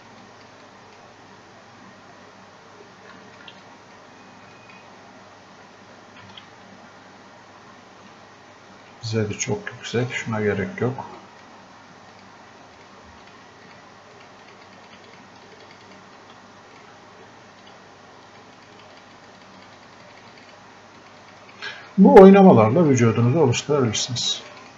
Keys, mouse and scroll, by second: 2.1-2.4 scroll up 1, 3.2 alt+click, 6.2 ctrl+z, 8.8 shift+click, 16.8 click.